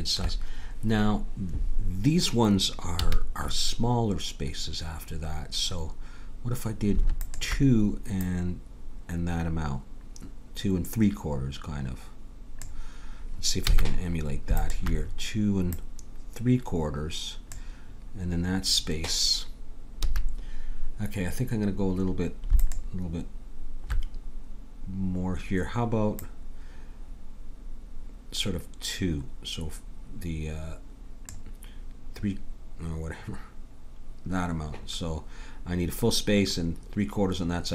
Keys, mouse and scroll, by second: 3.1 a, 7.1-9.9 drag, 13.7 a, 14.6-17.4 drag, 20.1 a, 22.6-24.3 drag, 26.2-28.0 drag.